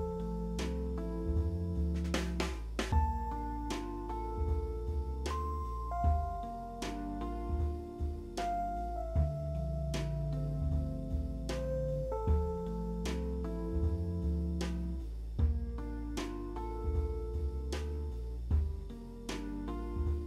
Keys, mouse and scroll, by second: 2.8 w, 17.7 middle click.